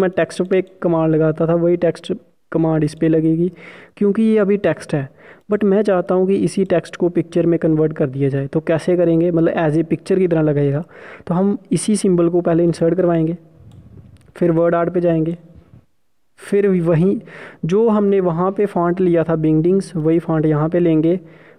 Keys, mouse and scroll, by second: 12.2 click.